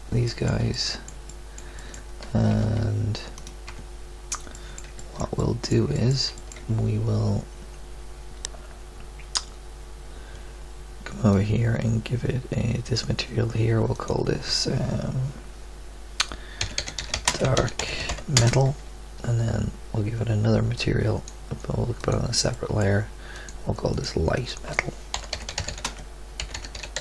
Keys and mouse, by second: 2.5 Tab, 3.7 Tab.